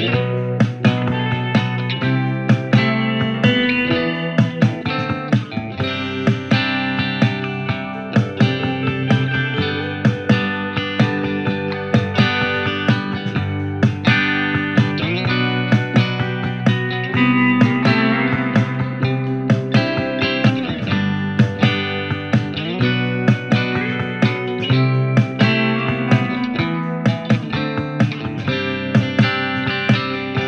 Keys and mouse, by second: 2.5 ctrl+Tab, 2.5 ctrl+click, 3.4-3.7 drag, 8.6 ctrl+z, 9.4 shift+a, 25.2-30.4 alt+drag, 25.2 w, 27.2 r, 29.3 e.